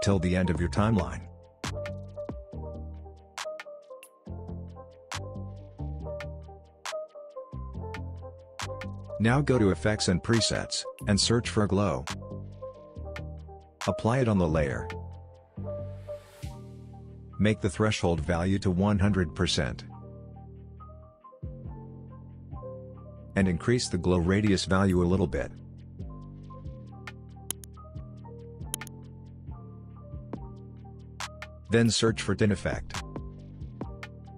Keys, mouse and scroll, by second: 0.3 space, 1.3 click, 2.6 space, 8.5 click, 12.0-13.2 typing, 14.0-15.6 drag, 16.2 scroll up 1, 18.1-19.9 drag, 21.7 scroll down 1, 22.4-23.8 scroll up 1, 23.8-28.4 drag, 34.2-34.3 typing.